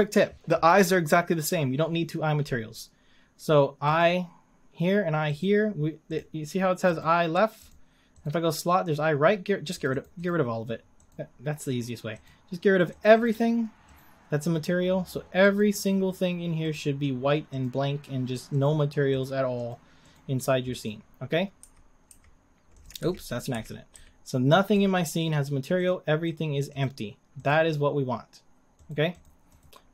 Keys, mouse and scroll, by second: 4.0 click, 5.4 click, 6.2 click, 9.1-11.1 drag, 13.0-14.0 drag, 15.6 click, 16.7-17.6 drag, 18.6-20.8 drag, 21.6 s, 23.1 ctrl+z, 23.5 a, 23.9 a, 24.4 scroll down 2, 24.7-26.0 middle drag, 26.0 click, 26.3 click, 26.8 click, 27.5 click, 29.7 click.